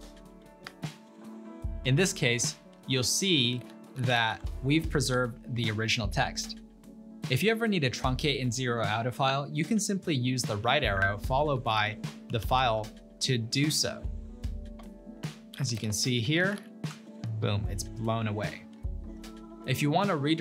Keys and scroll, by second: 0.0-0.4 typing, 0.7 Return, 3.0-4.7 typing, 4.9 Return, 10.7-13.5 typing, 14.6-17.2 typing, 14.7 Return, 17.3 Return, 19.3 typing.